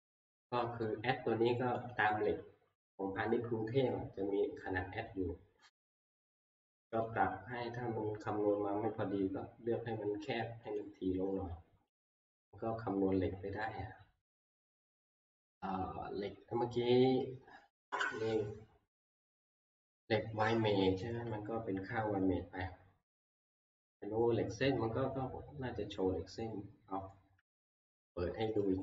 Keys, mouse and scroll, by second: 1.9 click, 5.1 middle click, 5.4-6.0 middle click, 5.5 middle click, 7.0 middle click, 10.8 click, 10.8 scroll, 12.1 click, 26.6 scroll, 27.3 middle click, 28.1 middle click.